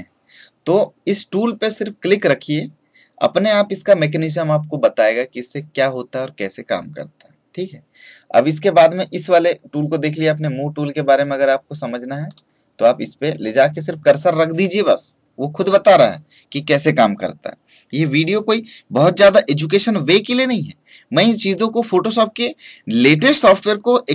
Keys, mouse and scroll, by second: 12.2 click.